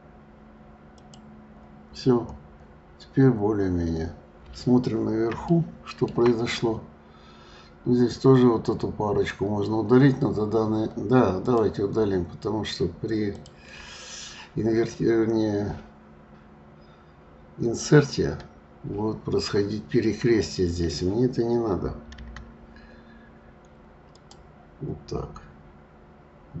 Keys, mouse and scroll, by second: 1.9-2.8 scroll down 8, 4.2 scroll up 4, 5.5-6.5 shift+middle drag, 6.5-7.1 scroll up 3, 11.4 click, 13.2 shift+click, 22.2 Delete.